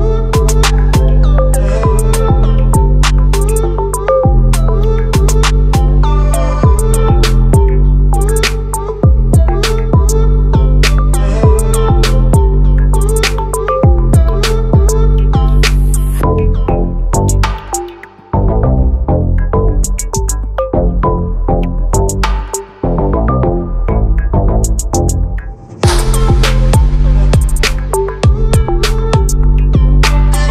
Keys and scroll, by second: 12.5 ctrl+t, 29.9 ctrl+t.